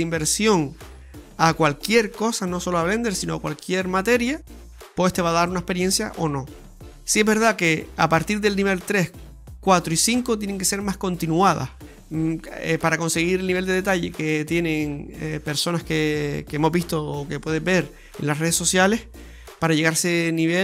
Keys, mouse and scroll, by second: 10.9 right click, 11.9 right click, 13.0 alt+shift+right click, 14.2 alt+shift+right click, 14.7 middle click, 15.3 alt+shift+right click, 16.0 alt+shift+right click, 16.0 middle click, 17.1 KP_0, 17.7 KP_1, 18.1 ctrl+KP_3, 20.5 click.